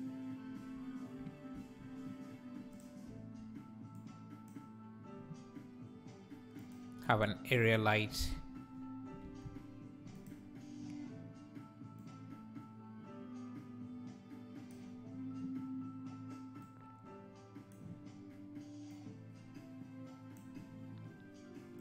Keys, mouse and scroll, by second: 2.8 click, 4.0 click, 6.6 click, 7.5 alt+r, 8.1 r, 12.1-18.9 drag.